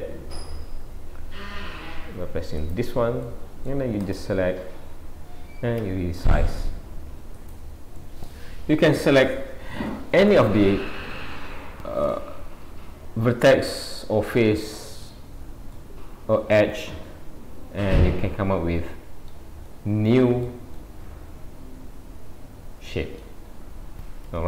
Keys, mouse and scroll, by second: 1.3-1.7 scroll down 2, 2.6 click, 3.3 middle click, 4.1 click, 5.0 scroll down 1, 5.8 s, 8.3 middle click, 10.4 middle click, 15.8 middle click, 19.7 middle click, 20.8 middle click, 23.5-24.3 scroll down 5, 24.3 Tab.